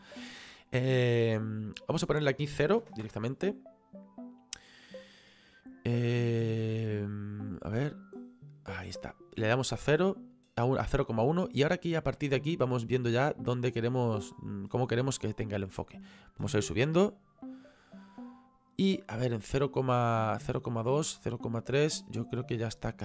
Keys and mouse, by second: 1.6 click, 2.8 KP_0, 4.5 click, 7.6 click, 9.3 click, 13.0 click, 17.0 click, 20.7 click, 22.3 click.